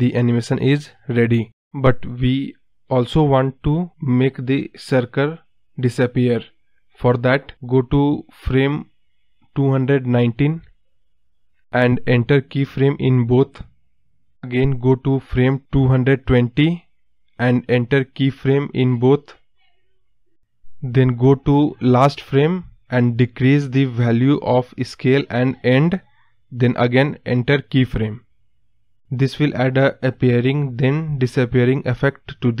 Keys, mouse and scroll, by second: 2.0 space, 2.6 space, 3.4 space, 5.7 click, 8.0-10.7 scroll down 1, 12.5-15.9 right drag, 15.9 Right, 19.4-22.1 right drag, 22.1-29.3 drag, 29.3-31.3 right drag, 31.3-32.6 drag.